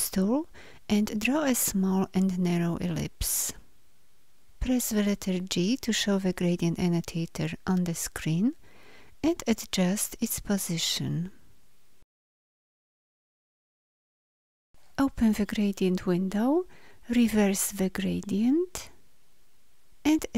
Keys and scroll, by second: 5.7 g.